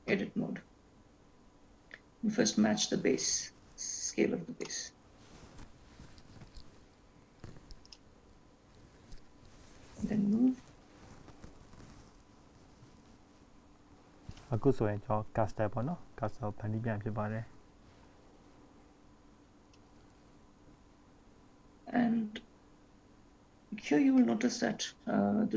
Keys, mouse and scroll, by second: 1.2-1.8 scroll up 1, 1.8 scroll up 1, 2.0-2.9 scroll down 3, 3.9 click, 6.7 s, 9.3 click, 15.2 scroll up 2, 15.8-16.5 scroll up 2, 16.9 shift+middle click, 22.2-22.8 scroll down 1, 22.8-24.1 scroll down 5, 24.1 scroll down 2, 24.9-25.5 scroll down 1.